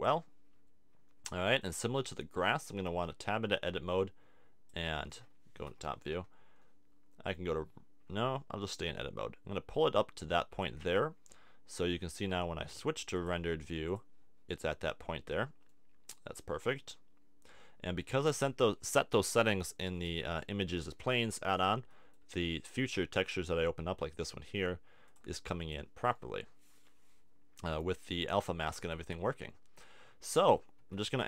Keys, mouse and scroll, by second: 1.1 click, 3.1 Tab, 3.9 click, 5.1 click, 5.6 middle click, 5.8 KP_7, 8.9-10.8 drag, 11.9 Tab, 12.3 Tab, 13.9-15.0 drag, 15.5 middle click, 15.8 click, 27.0-30.7 middle drag, 30.8 Tab.